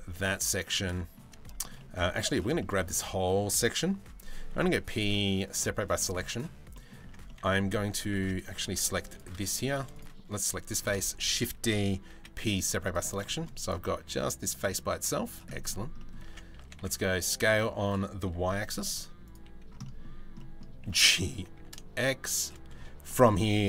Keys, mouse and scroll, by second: 0.2 shift+middle click, 0.5 middle click, 1.2 shift+middle click, 2.2 middle click, 2.6 middle click, 5.4 Tab, 5.6 middle click, 5.9 middle click, 6.3 middle click, 6.6 Tab, 6.9 middle click, 8.3 Tab, 8.6 3, 8.7 click, 10.4 shift+d, 11.7 p, 12.3 Tab, 12.4 click, 12.9 shift+middle click, 13.6 z, 14.6 z, 15.1 middle click, 15.6 middle click, 15.9 Tab, 16.2 a, 16.4 s, 17.8 s, 19.4 middle click, 20.0 middle click, 20.4 g, 22.7 middle click.